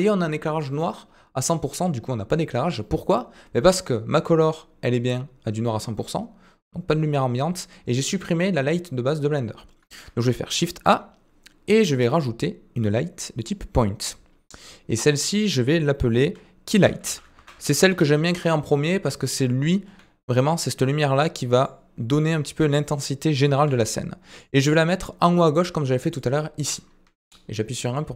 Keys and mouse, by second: 4.1 click, 15.2 click, 15.2-18.9 drag, 22.2-23.1 middle drag, 24.6-25.5 middle drag.